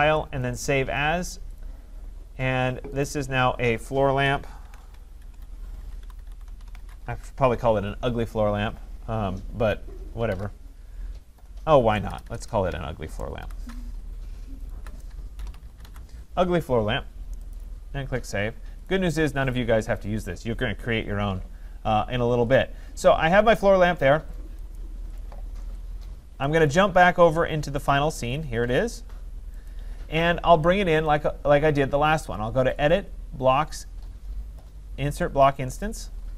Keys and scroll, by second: 4.6 ctrl+a, 12.1 BackSpace, 13.9 Left.